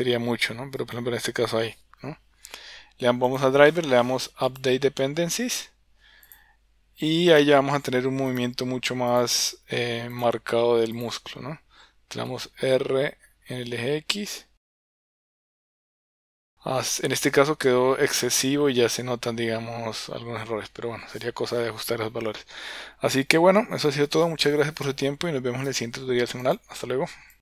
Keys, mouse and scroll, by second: 7.3 click, 10.1-11.1 drag, 12.2 r, 17.4 r.